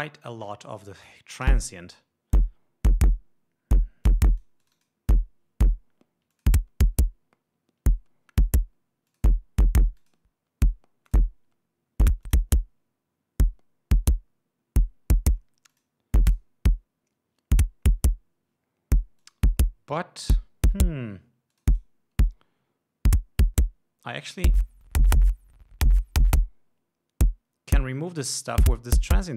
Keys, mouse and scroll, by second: 1.9 l, 4.5 click, 6.8 click, 9.5 click, 10.4 click, 11.5 click, 12.7 click, 16.2 click, 16.7 click, 19.7 click, 22.0 click, 24.7-28.8 drag.